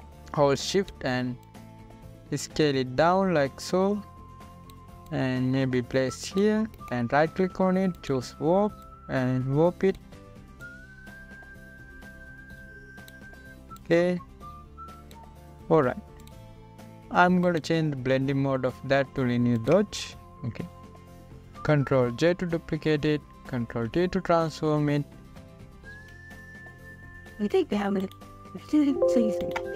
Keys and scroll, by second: 23.7 ctrl+j, 25.4 t, 27.5 ctrl+t.